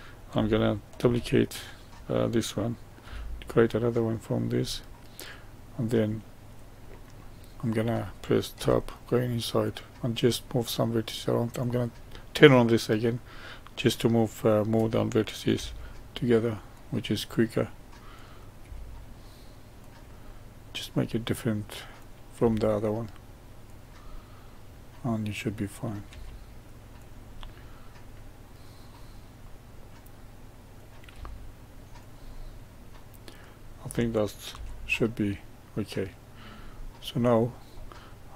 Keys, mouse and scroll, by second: 0.9 shift+d, 4.6-7.8 middle drag, 8.5 Tab, 9.6 click, 11.5 click, 13.9-15.5 middle drag, 15.5 g, 17.1-18.1 middle drag, 18.1 click, 18.5 g, 20.1-21.9 middle drag, 21.9 click, 22.3 g, 24.0-25.6 middle drag, 25.6 click, 26.0 g, 27.3-30.7 middle drag, 30.7 click, 31.0 g, 32.3-34.4 middle drag, 34.4 Tab, 35.0-37.2 middle drag, 37.2 scroll down 1, 37.6-38.3 middle drag.